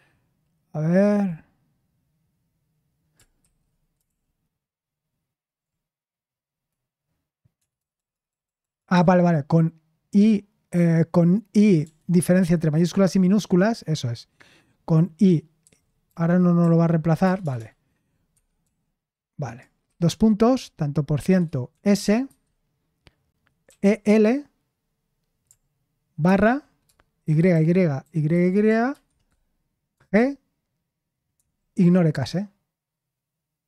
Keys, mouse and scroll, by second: 4.1 ctrl+p, 4.1 typing, 5.6 typing, 7.5-8.9 typing, 11.8 BackSpace, 15.6-17.4 typing, 18.3 Escape, 18.6 u, 21.2-22.3 typing, 23.4-24.3 typing, 26.2-29.9 typing, 31.3 typing.